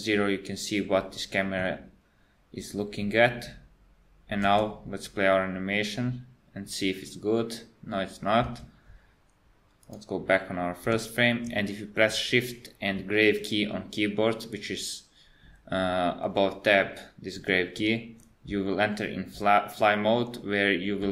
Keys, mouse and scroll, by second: 4.4 space, 8.5 space, 9.8 click, 13.0 shift+`.